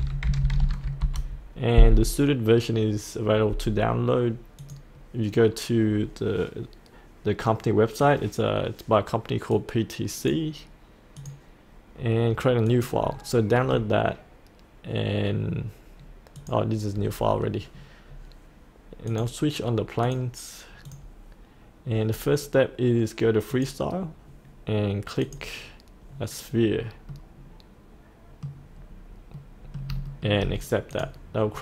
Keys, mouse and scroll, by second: 0.0-0.9 typing, 1.0 Return, 2.7 Return, 4.6-12.2 drag, 17.5-18.0 scroll up 1, 18.0-19.1 scroll down 1, 19.1 click, 27.1-28.5 middle drag, 28.7-29.3 scroll down 1, 29.3 middle click, 30.0 shift+middle click, 30.9 click, 31.5-31.6 scroll up 1.